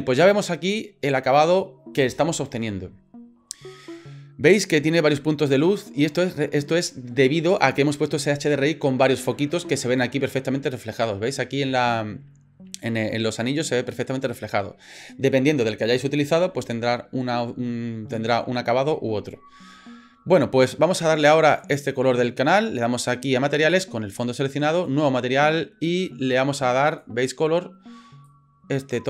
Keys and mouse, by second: 21.5 click, 24.8 click, 26.9 click.